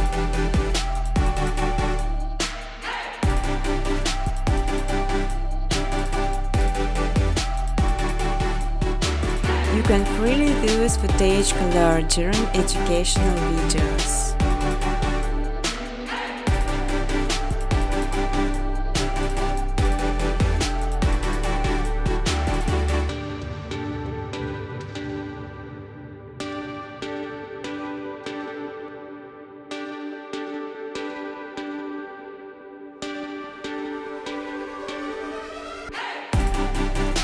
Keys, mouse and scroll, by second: 2.1 click, 2.5 click, 3.0 click, 4.3 click, 5.8 6, 6.0 6, 6.4 click, 7.4 click, 7.9 click, 9.3 click, 9.6 click, 11.6 click, 13.2 click, 13.8 click, 14.3 click, 15.3 click, 16.2 5, 17.4 9, 17.9 click, 19.0 click, 20.7 click, 20.8-22.3 typing, 23.1 Tab, 23.4 1, 24.1 click, 25.2 click, 26.1 click, 27.4 ctrl+z, 28.2 click, 30.3 click, 31.8 click, 32.7 click, 33.5 click, 35.8 click, 36.5-37.2 typing.